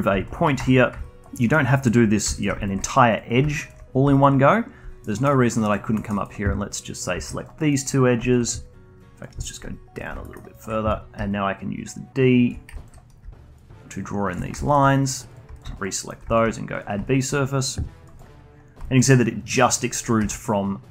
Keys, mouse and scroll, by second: 0.1 alt+click, 0.5 2, 0.6 click, 1.0 alt+click, 1.4 alt+middle click, 1.6 alt+click, 2.5 alt+click, 3.6 alt+shift+click, 4.1 alt+click, 5.0 alt+middle click, 5.3 alt+click, 5.9 alt+middle click, 6.1 alt+click, 7.1 shift+click, 7.3 alt+click, 7.5 alt+middle click, 8.0 scroll up 1, 8.2 alt+click, 9.4 alt+middle click, 10.0 shift+click, 10.2 alt+middle click, 10.5 alt+click, 11.1-13.2 typing, 11.8 click, 12.7 alt+click, 13.5-15.3 drag, 15.5 shift+click, 15.7 alt+click, 15.9 alt+middle click, 16.3-18.6 shift+right drag, 18.6 scroll down 2, 18.8-19.6 alt+drag, 20.1 g.